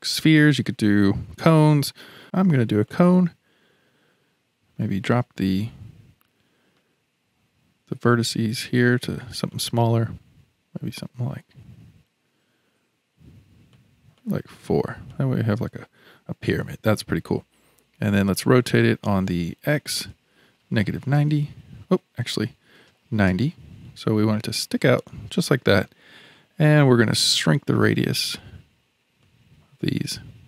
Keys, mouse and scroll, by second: 4.8-7.9 drag, 8.8-15.1 drag, 15.1-18.2 middle drag, 19.9-24.6 drag, 24.6-27.2 middle drag, 27.2-30.4 drag.